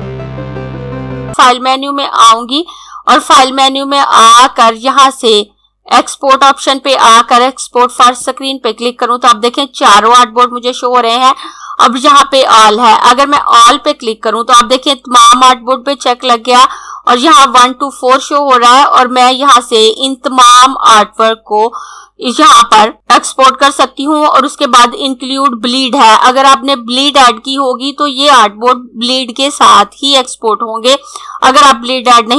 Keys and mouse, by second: 3.1 click, 7.9 click, 13.1 click.